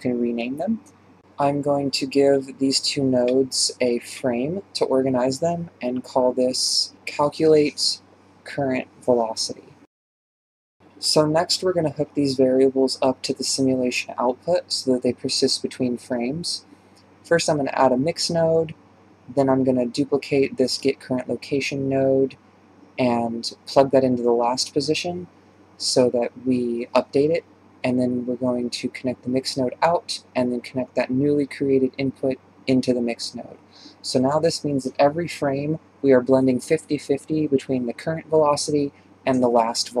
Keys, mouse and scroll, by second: 1.2-2.1 drag, 2.5 ctrl+j, 9.6 r, 11.5 shift+space, 12.6 shift+space, 15.0-18.3 drag, 19.8 BackSpace, 22.6 click, 22.8 shift+d, 24.1 alt+p, 26.3 click, 27.3-28.2 drag, 30.0-32.7 drag, 33.4 click, 34.4-40.0 drag.